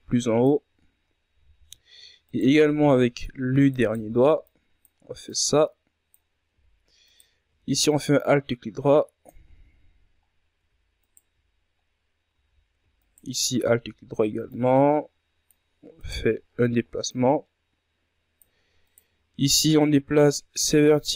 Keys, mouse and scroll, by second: 2.6-3.2 shift+scroll up 5, 3.2 z, 3.6-4.2 shift+scroll up 1, 4.2 right click, 5.0 c, 5.7 z, 6.2-8.8 drag, 8.8 alt+right click, 9.7-11.3 drag, 11.3-12.0 scroll down 3, 12.0-12.8 scroll up 2, 12.8 alt+right click, 13.5-14.1 scroll up 2, 14.1 z, 14.9 alt+right click, 15.6 z, 16.3-17.8 drag, 17.8 right click, 18.1 ctrl+scroll down 4, 18.8 scroll down 1, 18.9-20.6 drag, 20.6 right click.